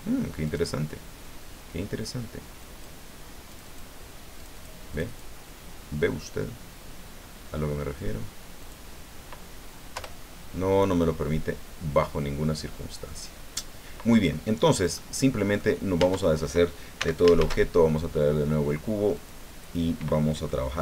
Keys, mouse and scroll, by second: 0.5 click, 2.6 click, 3.5 click, 4.4 click, 4.9 click, 8.6 click, 10.0 Return, 10.9-13.2 middle drag, 14.9 middle click, 16.0 Tab, 17.0 x, 17.1 shift+click, 17.4 shift+a, 19.1 click, 20.5-20.8 drag.